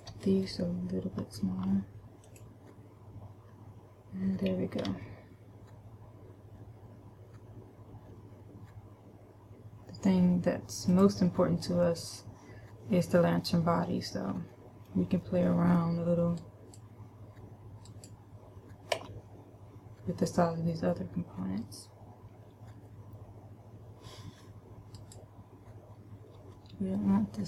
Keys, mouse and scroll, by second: 0.3 shift+right click, 2.0 s, 2.8 click, 5.3 g, 11.4 click, 12.3 middle click, 15.0 middle click, 16.0 middle click, 16.9 right click, 19.5 a, 25.3 right click, 26.9 g.